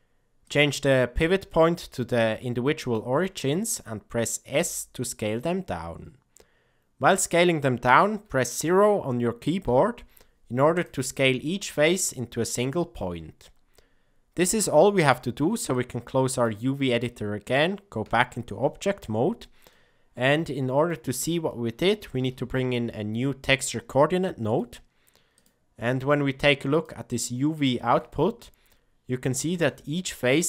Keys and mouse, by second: 0.3-3.0 drag, 4.4 s, 15.7 click, 18.0 Tab, 19.8 middle click, 21.4 middle click, 22.1 shift+a, 26.7 ctrl+shift+click, 27.1 ctrl+shift+click, 27.5 ctrl+shift+click.